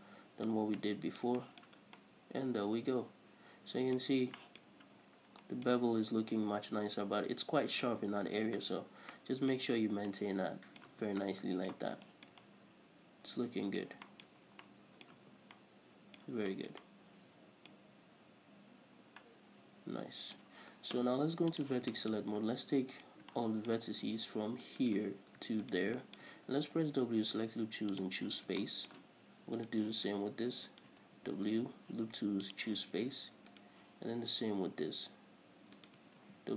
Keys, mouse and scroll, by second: 0.1 scroll down 1, 0.9 a, 2.2 scroll down 1, 4.4 scroll up 1, 5.1 scroll up 1, 5.8 middle click, 8.4 scroll up 1, 9.0-9.3 scroll down 1, 9.5 middle click, 9.9 scroll up 1, 10.2 Tab, 10.5 middle click, 11.3 Tab, 11.4 scroll down 2, 11.6 middle drag, 12.2 scroll down 2, 12.4 shift+middle click, 12.8 middle click, 14.4-21.9 shift+middle drag, 14.7-15.0 scroll up 2, 15.5 Tab, 16.7 scroll down 2, 18.2-19.1 scroll up 2, 19.1-19.6 scroll down 2, 21.9 click, 22.3-23.3 shift+middle drag, 22.6-23.3 scroll up 2, 23.3 right click, 23.7-25.2 shift+middle drag, 25.2 right click, 26.0 ctrl+right click, 26.4 shift+middle click, 26.9 w, 28.5-30.0 middle drag, 30.0 right click, 31.1 ctrl+right click, 31.4 w, 33.9 right click, 36.2 ctrl+right click.